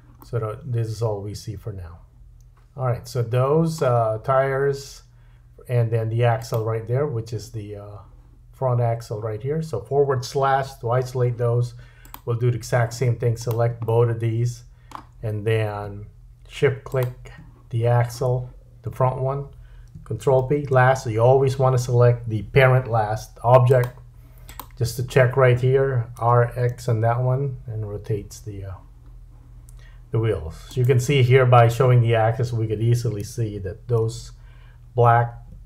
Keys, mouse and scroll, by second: 0.2 middle click, 6.4 shift+click, 10.6 /, 12.0 click, 13.4 shift+click, 13.9 middle click, 16.9 shift+click, 20.4 ctrl+p, 28.2 r, 33.2 r.